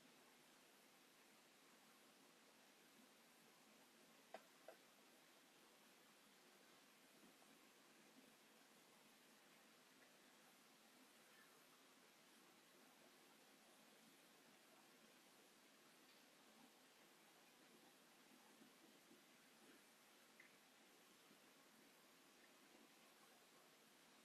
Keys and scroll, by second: 0.9 space, 6.1 space, 6.1 Escape, 6.3 space, 8.3 Delete, 9.2 ctrl+z, 10.1 m, 10.9 space, 15.5 ctrl+c, 15.7 Escape, 16.2 ctrl+v, 17.1 space, 18.9 f, 20.0 1, 20.1 Return, 21.0 ctrl+z, 22.0 5, 22.1 Return, 23.1 space.